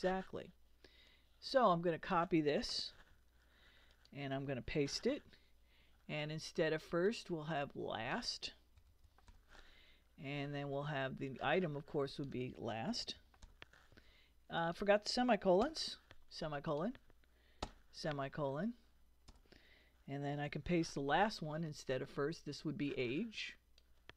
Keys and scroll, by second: 2.9 super+c, 4.9 super+v, 8.5-9.8 typing, 12.7-13.9 typing, 15.6 ;, 17.6 ;, 19.3 Return, 20.3 super+Return, 20.6 super+v.